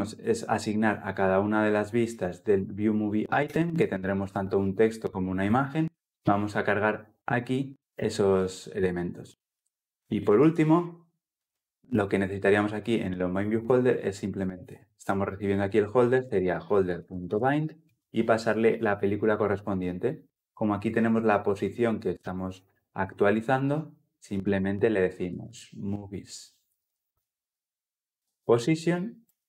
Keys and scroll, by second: 16.7 Return, 26.9 Return, 28.6 Return.